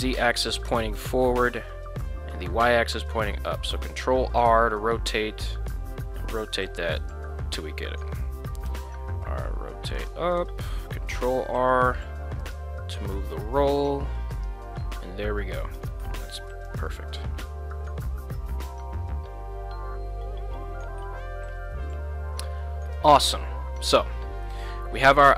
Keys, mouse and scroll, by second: 3.3 ctrl+r, 7.0 click, 7.6 KP_1, 8.7 r, 9.9 click, 10.4 ctrl+r, 12.4 click, 13.3 r, 14.3 click, 14.8 g, 15.8 click, 16.9 g, 22.9 click, 24.4 middle click, 25.1 middle click.